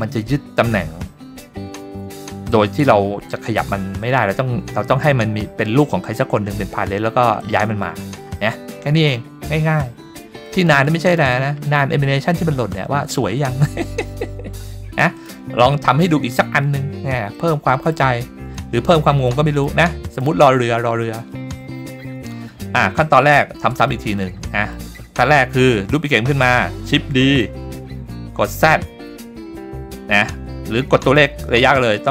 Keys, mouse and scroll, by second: 8.8 middle click, 10.3 click, 11.2 click, 15.1 click, 16.1-16.5 shift+middle drag, 16.9-17.3 scroll up 1, 17.3-17.9 middle drag, 18.2-18.5 scroll up 1, 18.5-18.9 shift+middle drag, 19.3-19.6 middle drag, 20.1 click, 21.0 middle click, 22.5-23.1 scroll down 1, 23.1 scroll down 1, 23.2-23.7 shift+middle drag, 23.9-24.2 middle drag, 24.4-24.7 shift+middle drag, 27.2 shift+d.